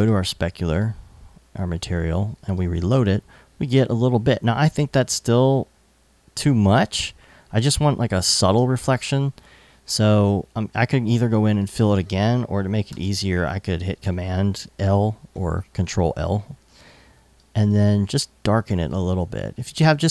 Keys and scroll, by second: 12.5 super+l.